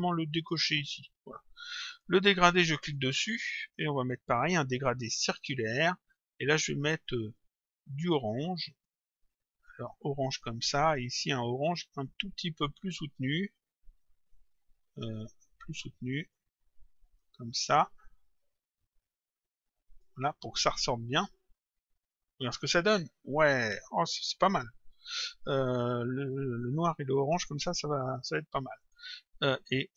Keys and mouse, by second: 0.4 click, 1.9 click, 4.2 click, 5.5 click, 7.1 click, 8.6 click, 11.8 click, 14.0 click, 15.3 click, 17.1 click, 19.4 click, 21.2 click, 28.8 click.